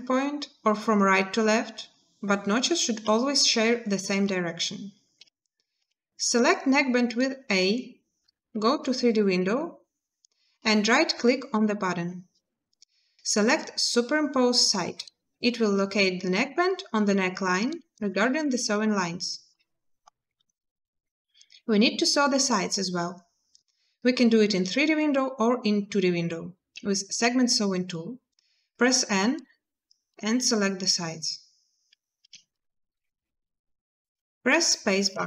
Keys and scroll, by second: 5.6 a, 26.9 n, 32.0 a, 34.9 space.